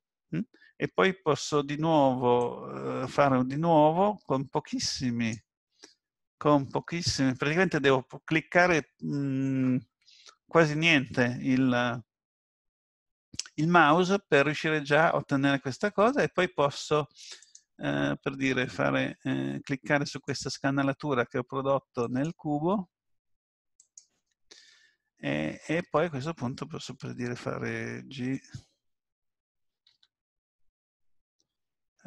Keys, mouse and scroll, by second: 2.4 click, 14.5 scroll up 1, 17.4 click, 20.1 shift+click, 25.4-26.1 scroll down 1, 29.9 g.